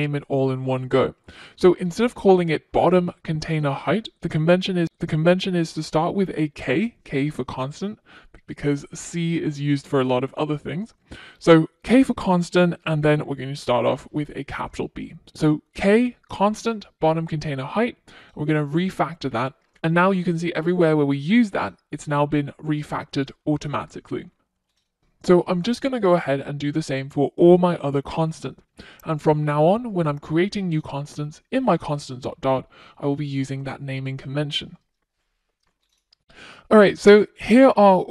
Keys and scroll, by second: 26.9 alt+Return, 28.3 shift+F6, 31.8 shift+F6.